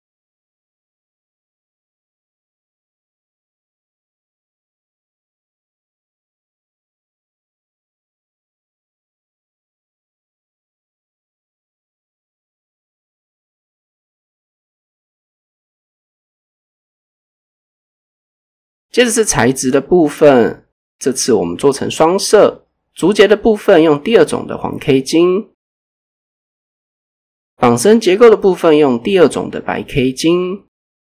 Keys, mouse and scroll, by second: 0.0 click, 0.4 click, 1.4 click, 2.3 s, 3.6 click, 4.6 Tab, 5.1 shift+middle click, 5.5 scroll down 1, 5.8-6.4 scroll up 2, 6.0 Tab, 6.4 drag, 7.7 s, 8.1 click, 8.4 click, 8.9 s, 9.9 click, 10.3 Tab, 10.4 scroll down 1, 11.7 click, 12.4 click, 12.9 shift+middle click, 13.7 scroll down 1, 14.0 shift+middle click, 15.5-15.9 scroll down 1, 15.9 scroll up 1, 18.7 click, 19.2 right click, 19.9 click, 21.2 click, 23.1 click, 24.2 click, 24.7 right click, 26.4 click, 28.3 click, 29.9 click.